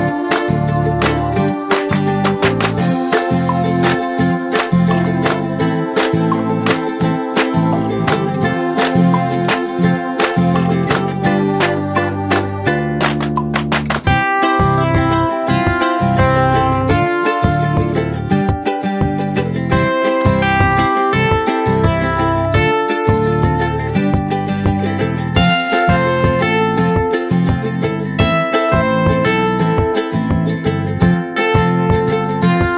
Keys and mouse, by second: 8.3 click, 9.9-15.2 drag, 18.2 Caps_Lock, 20.0-21.4 typing, 20.2 Caps_Lock, 20.8 Caps_Lock, 21.3 Caps_Lock, 23.1-24.3 typing, 25.4 ctrl+a, 26.7 click, 29.9 click.